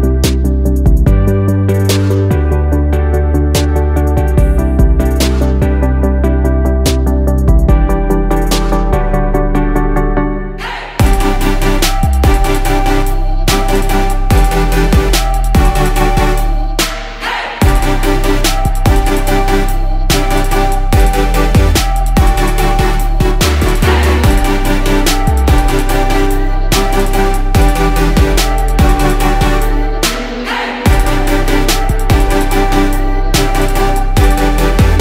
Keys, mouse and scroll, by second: 0.2-1.1 ctrl+z, 3.2-3.6 drag, 3.6 scroll down 1, 3.7 click, 4.1 click, 4.8 click, 5.2-5.7 scroll down 1, 5.7 click, 6.9-7.2 scroll down 1, 7.7 click, 8.3-9.1 drag, 10.0 ctrl+a, 11.3-12.1 scroll up 2, 12.1 click, 12.3 scroll up 2, 13.2 click, 13.9 click, 14.4 click, 14.8-15.2 scroll down 1, 15.7 click, 16.3-16.8 drag, 16.8-17.2 scroll down 2, 17.2 click, 17.5 click, 18.2-20.7 drag, 21.6 click, 22.0 click, 22.7-23.1 drag, 23.6 click, 27.0 click, 27.9 click, 28.4 click, 29.4 click, 30.6-31.2 scroll up 1, 32.1 click, 34.0-35.0 drag.